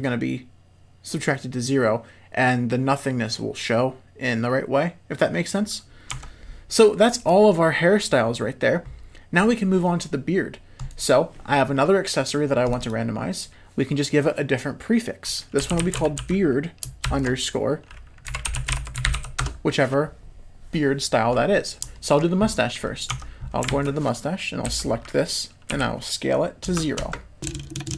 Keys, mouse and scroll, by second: 6.1 Tab, 12.7-20.4 drag, 21.3-21.7 middle drag, 21.9 shift+middle click, 22.8 middle click, 23.1 Tab, 23.7 alt+a, 24.7 l, 25.7 s.